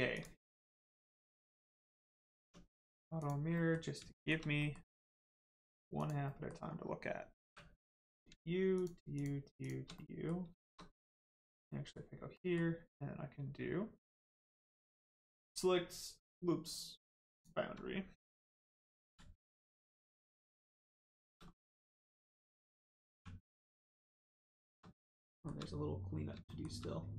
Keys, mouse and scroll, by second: 0.1 click, 0.5 middle click, 1.5 click, 2.1 middle click, 2.3 Tab, 2.7 middle click, 3.1 click, 3.5 middle click, 4.1 shift+middle click, 4.5 middle click, 5.5-5.9 scroll up 1, 5.9 click, 6.2 middle click, 6.6-7.4 scroll down 1, 7.4 3, 7.8 click, 8.1 scroll up 1, 8.7 shift+click, 9.9 middle click, 11.1 ctrl+click, 11.6 middle click, 15.2 click, 19.0 ctrl+e, 20.0 click, 20.5 middle click, 21.1 shift+middle click, 21.4 scroll up 1, 22.1 click, 23.1 1, 23.6 click, 24.2 shift+click, 25.3 shift+middle click.